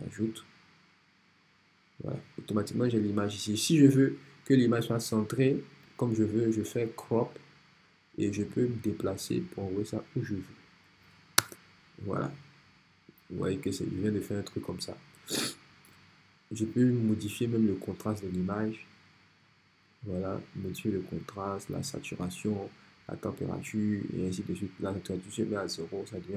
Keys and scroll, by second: 11.4 Return.